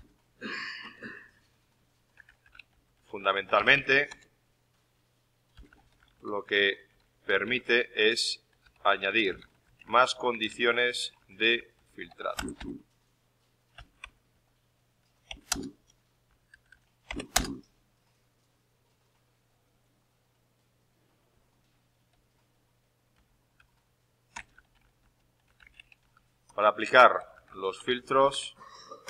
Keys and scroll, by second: 1.8-4.1 typing, 24.2-29.0 typing.